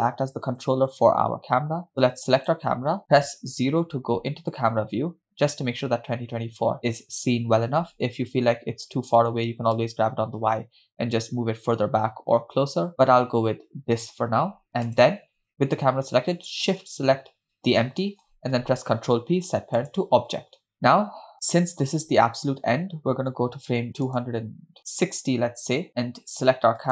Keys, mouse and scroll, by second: 2.4 click, 3.5 KP_0, 9.5 g, 15.0 KP_0, 17.4 shift+click, 19.4 ctrl+p, 22.9-24.2 scroll down 2, 24.6 click, 25.3 click.